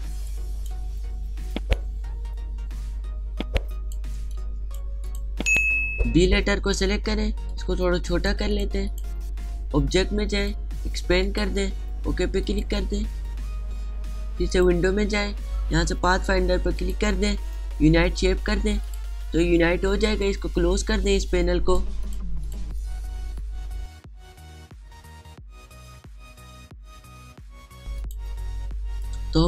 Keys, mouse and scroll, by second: 23.9 click, 26.1-29.4 drag, 27.5 click, 28.1 click.